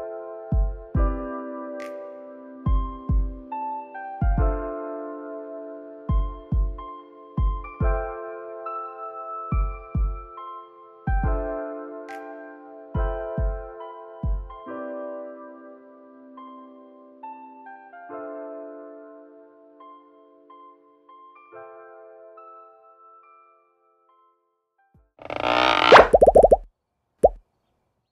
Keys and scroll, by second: 1.9 ctrl+s, 5.8 alt+[, 6.3 ctrl+s, 16.2 alt+[, 18.0 x, 19.9 ctrl+s, 22.2 space.